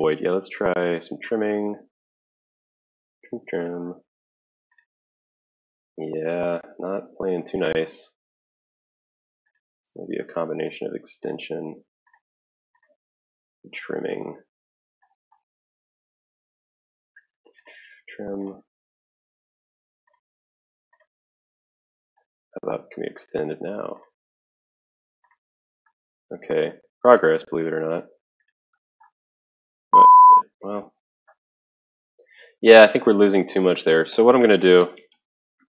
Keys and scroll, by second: 6.3 ctrl+z, 6.8 ctrl+z, 33.5 ctrl+z, 33.8 ctrl+z, 34.2 ctrl+z, 34.4 ctrl+z, 34.6 ctrl+z, 34.9 ctrl+z, 35.1 ctrl+z.